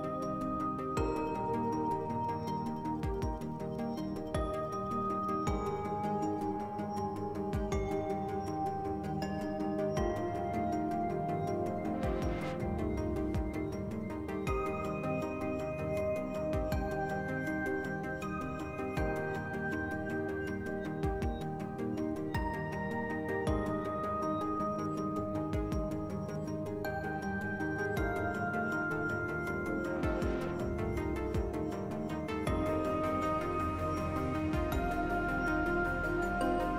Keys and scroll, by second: 8.5 s, 16.5 2, 16.8 s, 18.5 s.